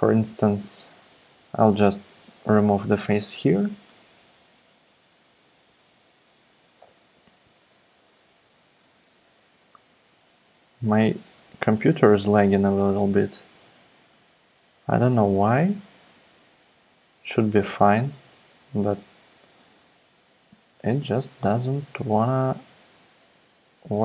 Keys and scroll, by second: 2.7 BackSpace.